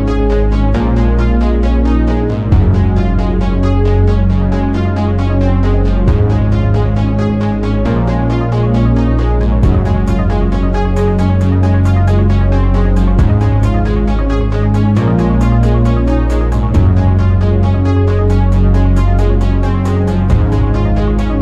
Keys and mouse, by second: 2.6-4.7 drag, 8.7 click, 11.0 click, 11.7 shift+a.